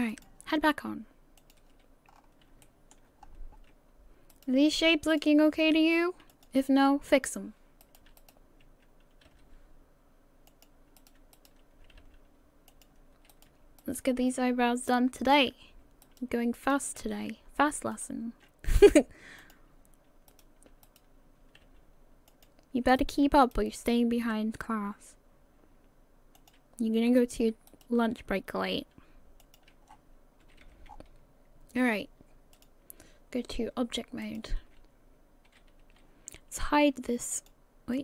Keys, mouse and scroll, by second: 0.1 click, 2.1 click, 2.1 scroll up 5, 2.8 shift+middle click, 3.2-4.3 scroll up 2, 4.3 right click, 5.1 shift+right click, 6.3 click, 7.8 right click, 8.2 shift+right click, 9.3 g, 11.0 right click, 11.3 right click, 12.3 g, 13.3 right click, 14.0 shift+right click, 14.3 g, 16.0 right click, 16.6 shift+right click, 17.0 shift+d, 18.7 g, 20.3 right click, 20.9 shift+right click, 21.6 g, 23.0 right click, 23.8 shift+right click, 24.7 g, 27.7 shift+right click, 28.8 g, 29.9-30.3 scroll down 7, 30.4 a, 30.6 a, 30.9-32.5 scroll down 2, 32.5 click, 35.5 a, 35.8 a, 37.3 click.